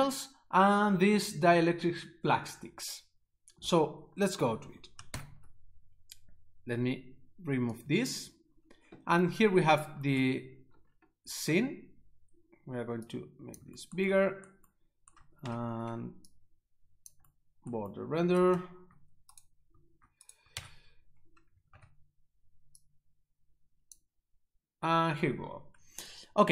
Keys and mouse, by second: 5.1 ctrl+Up, 7.8 click, 13.1 click, 15.4 ctrl+b, 16.4 click, 19.3 right click, 20.2 right click, 20.5 shift+z, 21.7 ctrl+b, 22.8 click.